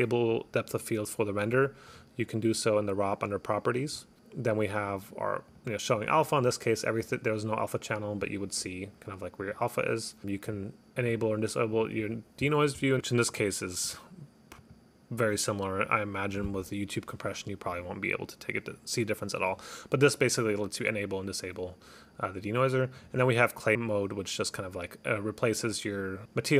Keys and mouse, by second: 1.9 click, 5.0 click, 5.6 click, 6.0 click, 7.2 click, 9.5 click, 10.6 click, 11.1 click, 11.8 click, 13.0 click, 13.9 click, 14.6 click, 15.3 click, 15.9 click, 16.4 click, 17.3 click, 17.8 click, 23.1 click.